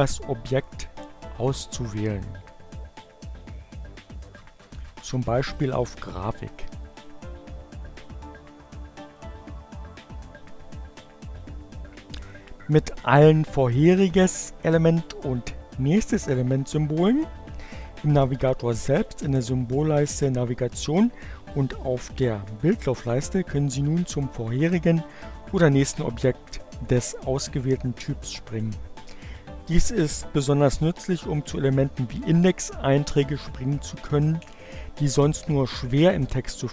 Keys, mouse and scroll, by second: 4.4 click, 8.8 click.